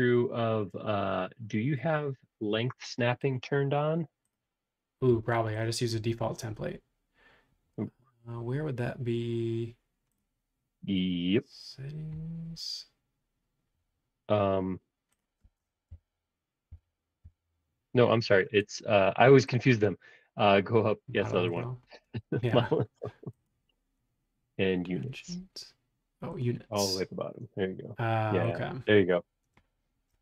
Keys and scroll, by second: 15.9 Down, 16.7 Down, 17.2 Down.